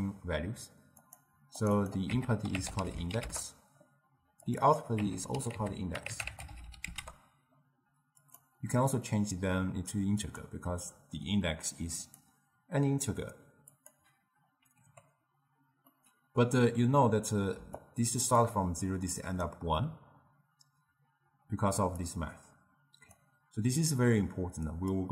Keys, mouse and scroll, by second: 1.0 click, 1.6 click, 1.8-4.6 drag, 4.7-7.7 drag, 8.3-11.3 drag, 12.1-14.9 drag, 14.9 n, 15.9-17.7 middle drag, 17.7 d, 17.8-18.4 drag, 18.4-19.0 d, 19.2 click, 19.5-19.8 d, 22.1 click, 24.8-25.1 drag.